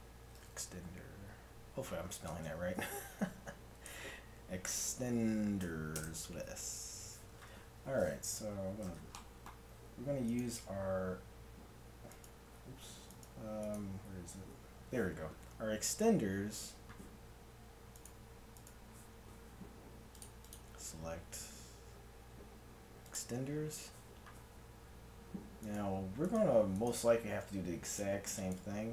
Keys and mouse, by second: 8.5 n, 9.3-10.3 drag, 10.3-15.6 right drag, 15.6-18.0 middle drag, 18.0 right click, 20.2-24.4 drag, 20.2 right click, 25.7-28.9 right drag.